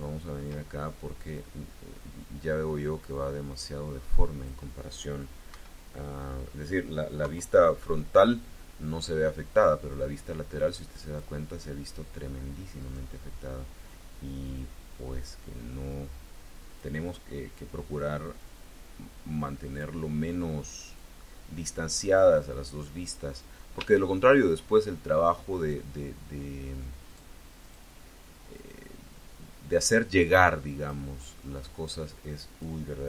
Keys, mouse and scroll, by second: 1.2-4.5 drag, 5.3 KP_1, 7.1 KP_3, 9.7-11.2 drag, 12.7 click, 13.7-16.9 drag, 18.3-19.8 drag, 20.7 middle click, 22.0-23.1 drag, 23.3-23.7 scroll up 3, 23.7 shift+click, 25.4 click, 26.9 click, 27.5 click, 28.4-30.9 drag, 31.5-32.7 drag.